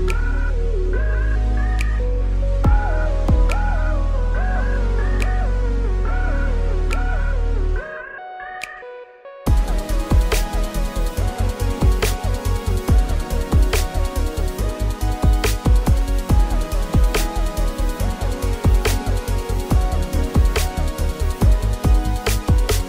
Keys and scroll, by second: 1.6 Tab, 3.0 i, 3.9 g, 5.1 s, 9.2 s, 9.9 ctrl+r, 10.5 s, 13.9 Caps_Lock, 18.1 ctrl+r, 18.6 s, 20.6 g.